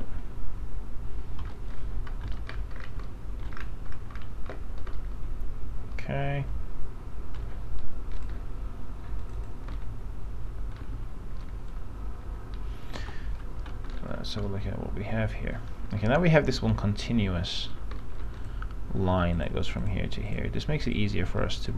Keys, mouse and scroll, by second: 0.2 t, 2.0 scroll down 1, 2.4 middle click, 2.6-3.2 scroll down 1, 3.4 alt+middle click, 3.7-4.6 scroll down 1, 5.0-7.9 alt+middle drag, 8.4 click, 9.9 alt+middle click, 11.1 alt+f, 12.0 middle click, 12.5-13.2 scroll up 1, 13.2-13.8 scroll up 1, 13.8-14.2 scroll up 1, 14.2-14.6 scroll down 1, 15.5 alt+middle click, 16.0-16.8 scroll up 1, 16.8 alt+middle click, 18.2 alt+middle click, 18.5 click, 20.0 ctrl+click, 21.0 ctrl+click.